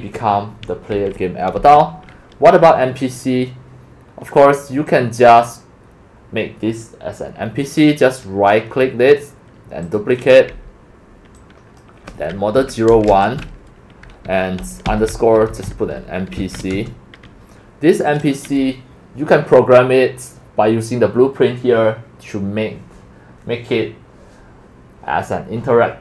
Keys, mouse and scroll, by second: 0.0-1.1 typing, 1.6 Escape, 2.8 scroll up 1, 2.8 scroll, 2.9 scroll, 2.9 scroll, 3.2 scroll, 3.3 scroll, 4.3 scroll, 4.9 click, 5.5 click, 5.9-7.7 drag, 7.9 middle click, 9.9-11.8 drag, 12.5 Right, 12.9 BackSpace, 13.1 1, 15.2-16.7 typing, 18.1 click, 20.1 scroll, 20.6 middle click, 21.7 middle click, 21.9 middle click, 25.9 scroll down 4.